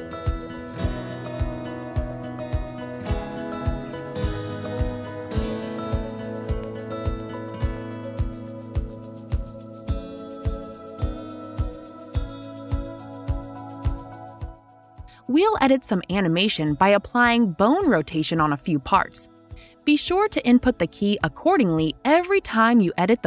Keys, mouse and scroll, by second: 3.1 click, 3.2 click, 6.2 click, 13.0 click, 17.4 right click, 17.4 typing, 20.2 click.